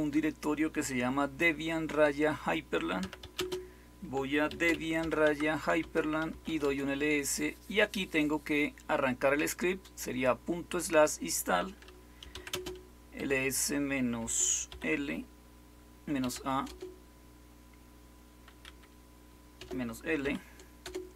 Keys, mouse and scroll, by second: 2.7-6.9 typing, 11.9-13.1 typing, 14.1-14.6 typing, 16.1-16.6 typing, 18.6-20.1 typing, 20.7 Return.